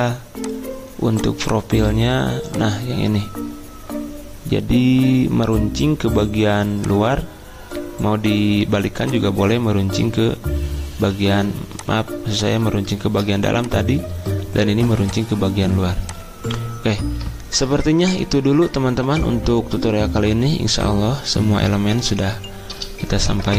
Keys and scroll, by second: 11.0 v.